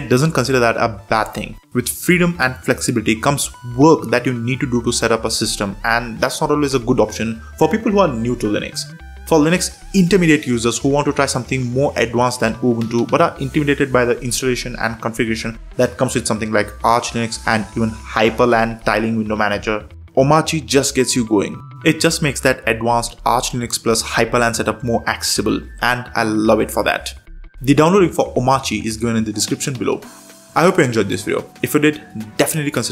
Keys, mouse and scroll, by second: 0.1 super+4, 1.3 ctrl+shift+super+space, 2.2 Down, 2.6 Up, 2.9 Down, 3.0 Down, 3.1 Down, 3.3 Down, 3.6 Down, 4.1 Down, 4.3 Return, 6.9 super+3, 8.0 super+4, 8.4 super+3, 8.8 super+4, 10.7 ctrl+shift+super+space, 11.9 Up, 12.5 Return, 15.9 super+3, 19.9 super+4, 22.2 ctrl+shift+super+space, 22.9 Up, 23.1 Up, 24.2 Return, 28.1 super+space, 30.3 Escape, 31.3 alt+super+space, 32.2 Down, 32.4 Down, 32.5 Down, 32.6 Down.